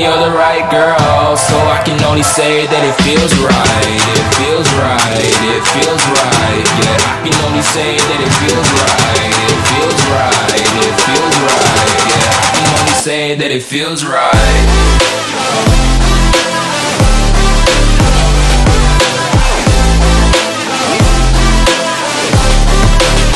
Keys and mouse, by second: 3.4-6.9 drag, 20.1-20.8 drag.